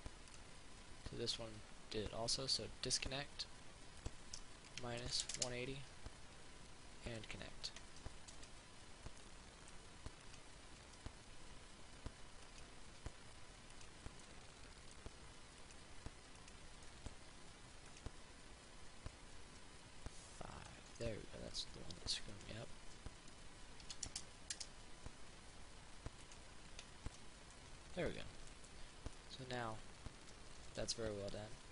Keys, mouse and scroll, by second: 2.5 click, 5.2 click, 7.3 click, 8.5 Tab, 9.5 middle click, 10.7 right click, 11.1 Tab, 12.7 right click, 14.5-15.5 middle drag, 16.0 right click, 17.1 middle click, 18.1 right click, 20.5 Tab, 21.1 Tab, 22.5-23.6 drag, 24.1 KP_1, 26.5 right click, 27.3 Tab, 27.7 middle click, 29.4-31.3 drag, 31.3 ctrl+z.